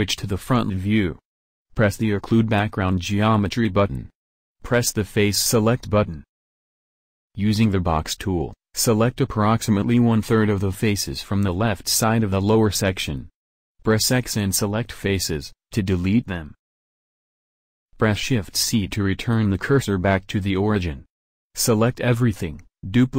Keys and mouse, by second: 6.1 b, 6.8 middle click, 8.0 b, 11.2 middle click, 11.7-13.6 drag, 12.7 x, 15.2-17.3 drag, 17.3 shift+c, 18.4 a, 18.9 shift+s, 20.1 shift+s, 21.2 shift+d.